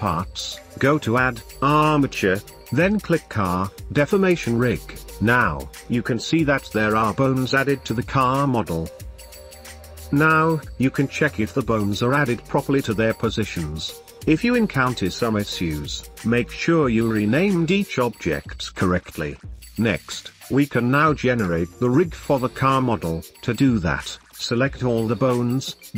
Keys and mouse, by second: 0.3-0.9 middle drag, 2.4-4.5 drag, 5.3 middle drag, 5.8 shift+click, 6.4 shift+middle click, 7.2 middle click, 7.2 click, 7.4 middle click, 7.6 middle click, 7.8 shift+middle drag, 8.1 middle click, 8.6 shift+middle click, 8.9 click, 9.1 middle click, 10.5-11.0 middle drag, 12.5 click, 13.0-14.3 middle drag, 15.2-15.5 shift+middle drag, 17.7-18.3 middle drag, 18.6 KP_3, 19.5-20.0 middle drag, 20.3-20.8 shift+middle drag, 21.1-21.5 middle drag, 22.4 middle click, 22.9-23.8 middle drag, 24.2 shift+middle click, 25.6 n.